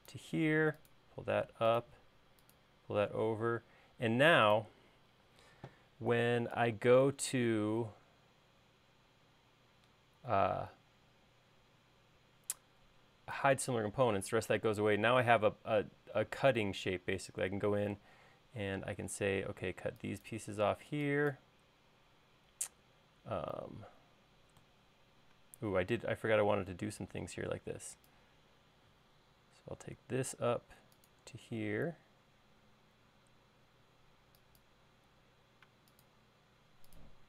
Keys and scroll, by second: 5.4 space, 18.6 e, 22.1 |, 35.0 l.